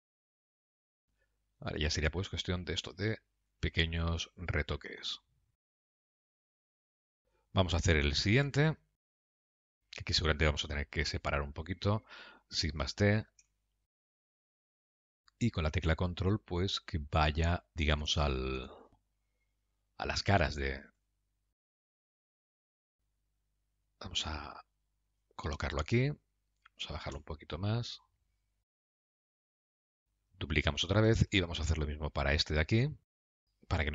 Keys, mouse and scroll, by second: 0.4 middle click, 0.8 click, 0.9 g, 2.1 click, 2.4 g, 5.3 middle click, 6.0 click, 6.1 middle click, 6.2 g, 6.8 middle click, 8.7 Tab, 9.0 scroll down 3, 9.1 middle click, 11.7 click, 13.0 shift+d, 15.1 middle click, 20.1 KP_Decimal, 20.9-21.5 scroll down 3, 21.4 middle click, 26.3 middle click, 27.4 g, 28.9 middle click, 29.2 g, 29.9 middle click, 31.1 shift+d, 33.4 middle click.